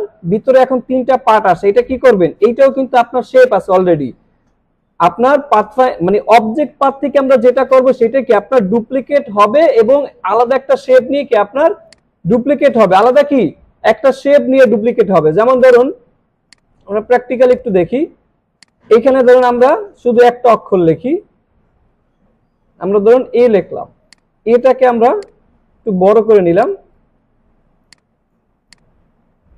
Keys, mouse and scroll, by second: 11.3 alt+scroll down 1, 11.7 space, 11.9-12.5 click, 12.3 space, 13.1 click, 13.3-14.0 space, 15.6 click, 16.0 scroll down 1, 16.5 click, 21.2 shift+a, 22.0 ctrl+a, 22.8 shift+a, 24.0 click, 25.2-26.2 shift+drag, 26.6-27.2 click, 27.8-28.4 shift+drag.